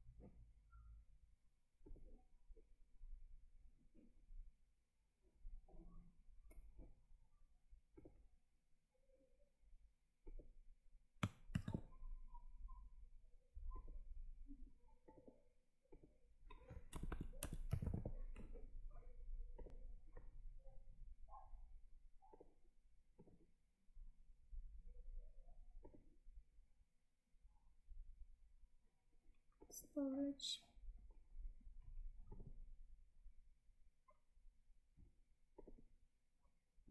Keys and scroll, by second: 11.4 ctrl+v.